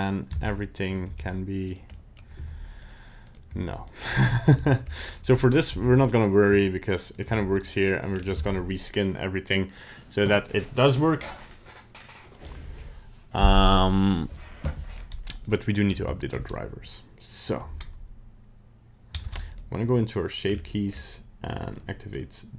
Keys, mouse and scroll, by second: 0.1 right click, 0.4 ctrl+Tab, 0.7 right click, 1.0 g, 1.9 middle click, 2.4 g, 3.3 right click, 3.5 g, 4.3 shift+middle click, 4.7 scroll up 2, 4.9 middle click, 5.5 right click, 5.7 g, 7.1 right click, 7.3 g, 8.1 scroll down 3, 15.0 scroll up 2, 15.5 right click, 16.1 shift+middle click, 19.2 ctrl+Tab, 19.5 right click, 20.5-20.9 scroll down 4, 20.9-21.5 scroll up 2, 21.7 click, 22.2 click.